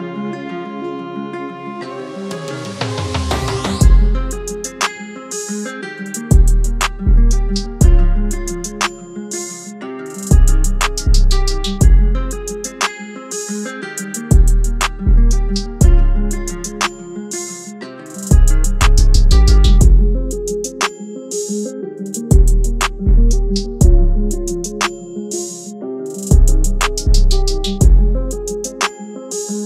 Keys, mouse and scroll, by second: 22.6-22.9 scroll up 1.